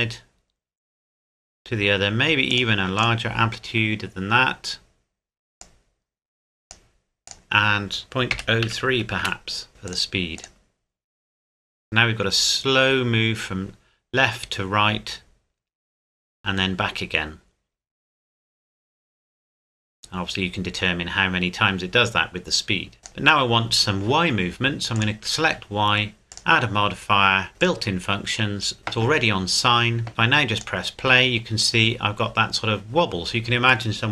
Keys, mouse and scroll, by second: 2.5 click, 3.0 click, 5.6 click, 8.0 KP_Decimal, 8.3 KP_0, 8.6 KP_3, 9.2 KP_Enter, 9.9 click, 23.0 click, 30.6 click.